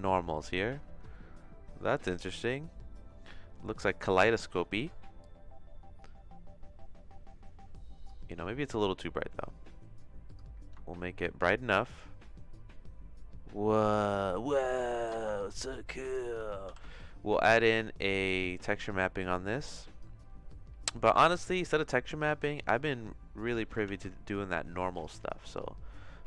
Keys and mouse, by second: 1.1-4.5 shift+middle drag, 5.2-8.1 drag, 8.7-10.3 drag, 11.6-14.5 shift+middle drag, 15.7 click, 16.7 ctrl+t, 17.9 click, 19.2-20.2 drag, 23.4 click, 23.6 x, 23.8 shift+a.